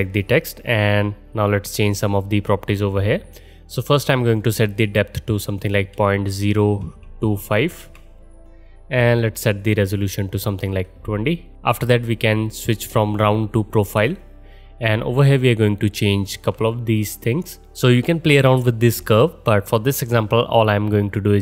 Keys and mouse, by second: 4.3-14.0 drag, 14.0-21.4 middle drag.